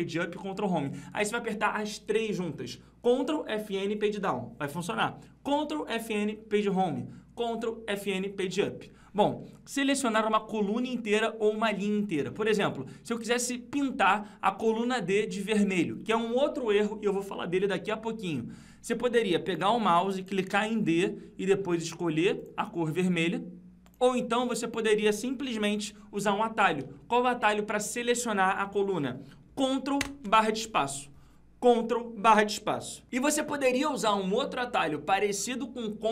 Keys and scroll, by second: 25.5 ctrl+z, 29.9 ctrl+space.